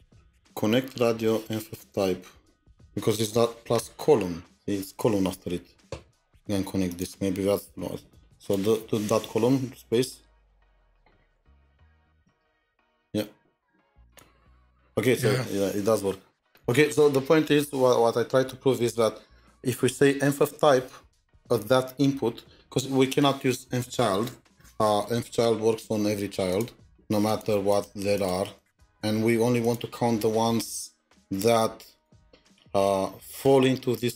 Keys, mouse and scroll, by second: 10.3-12.8 typing, 26.8 double click, 27.7 double click, 28.1 double click, 28.6 double click.